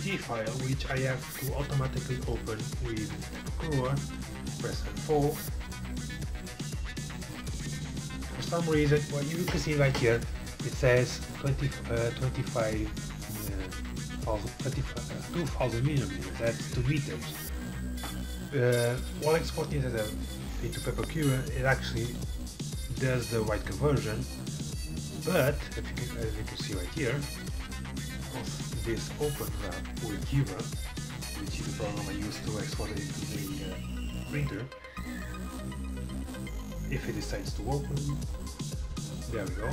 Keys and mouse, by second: 0.0-39.7 drag.